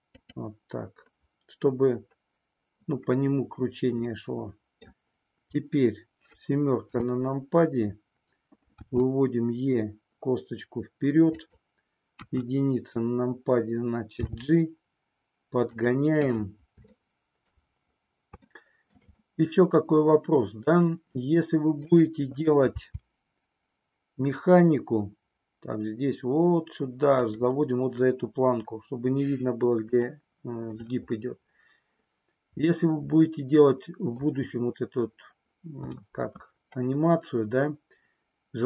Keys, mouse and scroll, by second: 0.1 click, 4.1 middle click, 6.9 KP_7, 8.7 e, 11.5 click, 12.1 KP_1, 14.2 g, 15.7 click, 17.1 shift+middle click, 18.4 shift+middle click, 19.2-21.8 middle drag, 22.7 g, 27.2 click, 30.1 shift+middle click, 32.8-34.3 middle drag.